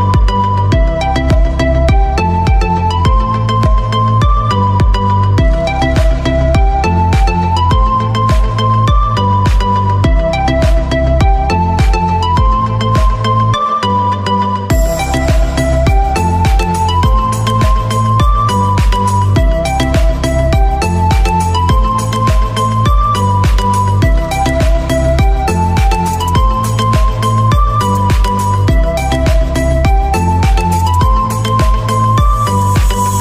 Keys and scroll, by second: 3.9 [, 4.1 [, 19.9 ], 20.1 ].